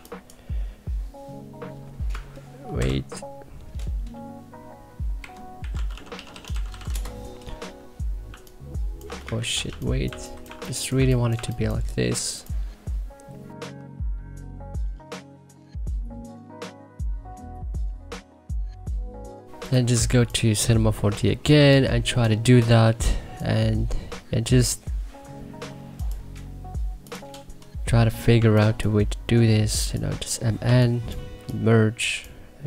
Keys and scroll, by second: 8.2 2, 9.3 ctrl+z, 9.4-11.3 typing, 19.8 2, 28.3 1, 31.3 3.